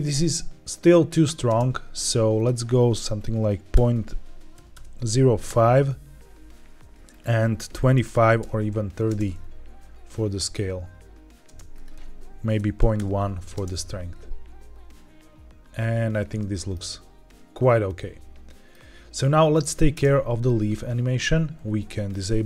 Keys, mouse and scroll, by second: 1.4 space, 2.2-6.0 drag, 7.0-8.7 drag, 9.0 space, 11.4 space, 11.6-13.1 drag, 13.5 space, 16.1-16.7 middle drag, 17.8-18.6 middle drag, 19.8 space, 22.0 click.